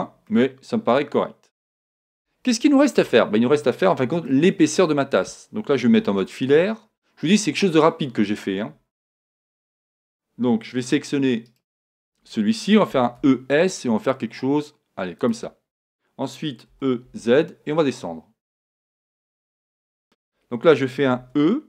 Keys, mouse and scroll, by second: 3.0 KP_1, 3.7 middle click, 4.4-6.8 middle drag, 5.9 z, 7.3-9.3 middle drag, 9.3 Tab, 9.8 Tab, 11.5-13.2 right drag, 12.9 e, 15.3-17.2 drag, 16.7 e, 20.0 click, 20.2-21.6 middle drag, 20.2 right click, 21.2 e.